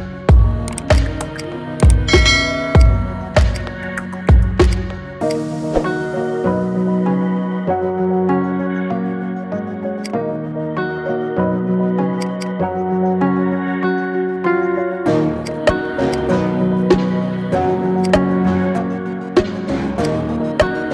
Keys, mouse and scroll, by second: 0.4 scroll down 2, 0.6 middle click, 1.0-2.7 right drag, 2.7 click, 3.6-4.0 drag, 4.0 scroll down 2, 4.7-5.3 drag, 5.7-6.0 scroll up 2, 6.0-6.9 middle drag, 6.9 scroll down 2, 7.1-8.5 middle drag, 8.5-8.8 scroll up 3, 8.8-9.4 middle drag, 9.4 scroll down 1, 9.6-10.0 middle drag, 10.0 click, 10.6 Tab, 11.8 ctrl+r, 14.0 p, 15.0 Tab, 15.4 click, 16.1-18.6 right drag, 18.8-20.0 scroll down 4, 20.0-20.9 drag.